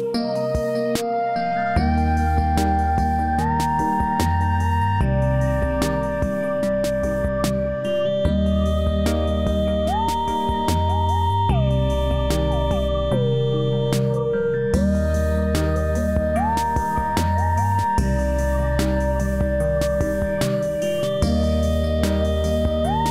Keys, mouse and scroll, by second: 4.3 e, 5.1-6.4 drag, 17.7 scroll down 1, 18.0 click, 21.9 click.